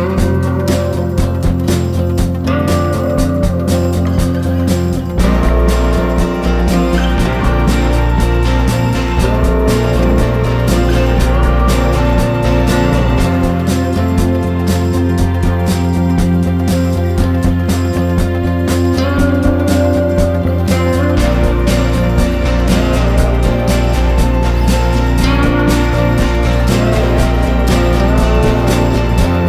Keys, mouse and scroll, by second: 0.7 Up, 0.8 Up, 0.9 Up, 1.0 Up, 1.3 Up, 2.6 click, 4.9 ctrl+scroll, 10.6 ctrl+scroll, 12.7-24.2 drag, 24.4 ctrl+click, 25.0-29.2 drag.